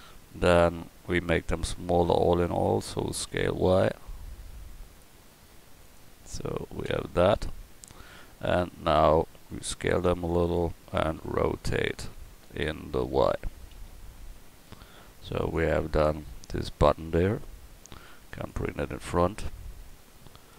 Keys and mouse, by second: 2.9 s, 6.8 KP_1, 9.4 s, 11.2 r, 13.4 r, 18.5 click, 18.8-19.8 drag, 19.8-20.2 middle drag.